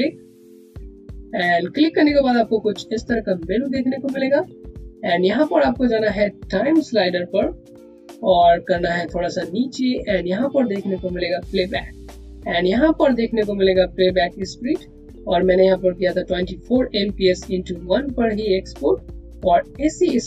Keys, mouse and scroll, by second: 0.4 click, 2.8 click, 8.5 click.